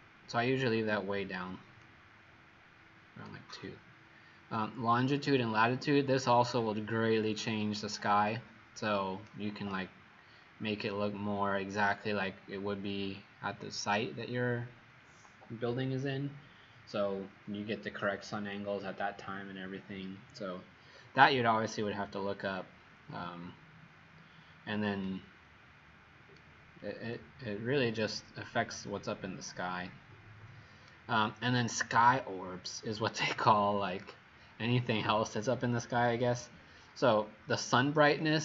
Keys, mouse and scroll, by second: 1.8 click.